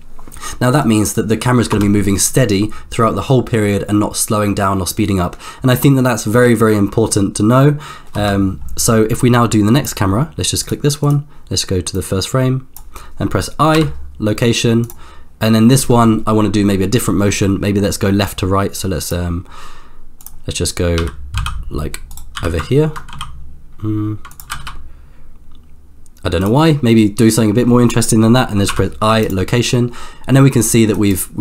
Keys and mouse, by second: 0.8 click, 1.8 space, 8.1 space, 9.3 click, 10.7 click, 12.0 click, 13.7 i, 18.3 click, 20.5 click, 20.9 g, 22.3 g, 24.5 g, 28.7 i, 30.5 middle click, 31.2 click.